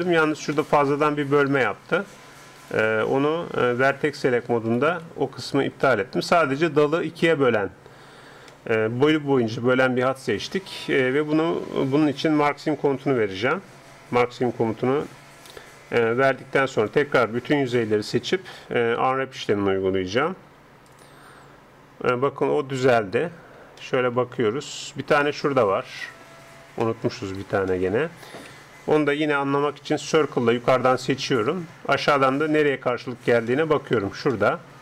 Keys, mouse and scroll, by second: 0.0-3.9 middle drag, 1.5-6.1 right drag, 3.9-5.7 drag, 5.9-11.1 middle drag, 16.7-18.7 drag, 19.0 a, 19.4 a, 20.5 u, 28.5 a, 29.5 c, 32.1 middle click, 32.7-34.8 middle drag.